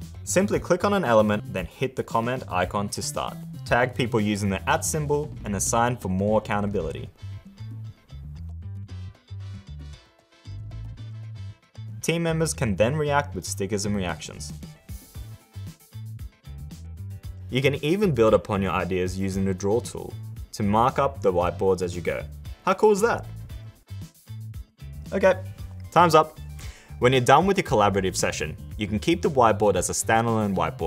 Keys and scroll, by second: 16.9 super++.